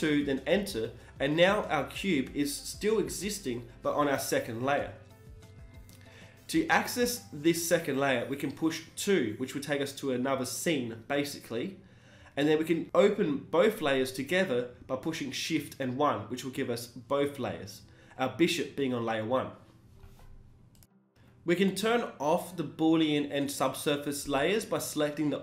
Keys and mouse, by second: 0.1 middle click, 0.4 z, 3.1-3.7 drag, 3.7-4.9 middle drag, 5.1 middle drag, 5.4 KP_1, 6.3-6.7 drag, 8.3 shift+2, 10.0-11.9 right drag, 11.1 g, 14.8-16.7 right drag, 16.3-18.9 drag, 17.0-18.9 right drag, 17.3 g, 19.7 g, 21.0 r, 24.6-25.4 right drag.